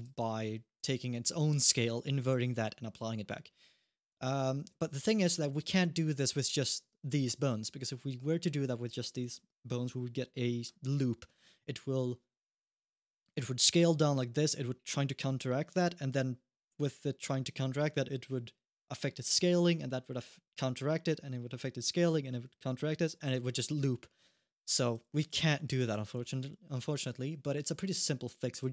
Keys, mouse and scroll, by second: 0.6 g, 3.9 alt+g, 5.4 alt+g, 7.2 click, 24.6 click, 25.6 alt+g, 28.3 click.